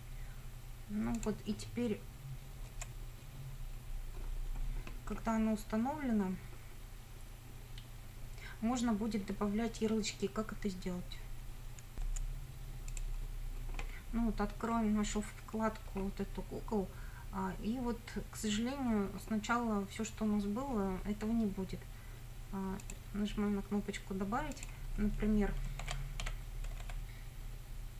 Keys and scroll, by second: 2.7 F5, 3.7 F5, 12.2 F9, 25.8 shift+c, 26.2 a, 26.7 BackSpace.